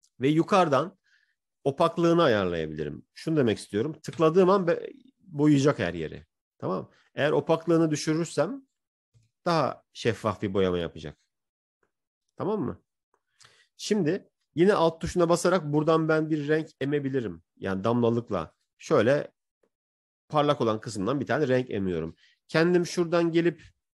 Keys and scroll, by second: 10.0 ctrl+z.